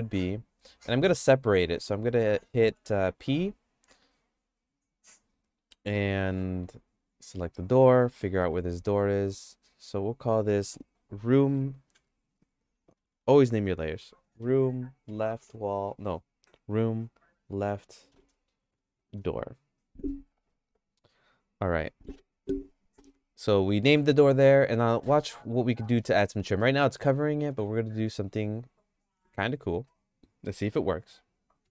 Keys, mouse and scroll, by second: 1.8 Tab, 2.2 Tab, 3.2 p, 6.6 Tab, 6.9 click, 8.4 KP_Decimal, 9.9 click, 10.1-24.6 drag, 12.5 BackSpace, 12.7 BackSpace, 13.0 BackSpace, 13.1 BackSpace, 18.9 o, 25.8 middle click, 26.2-27.4 shift+middle drag, 27.6 Tab.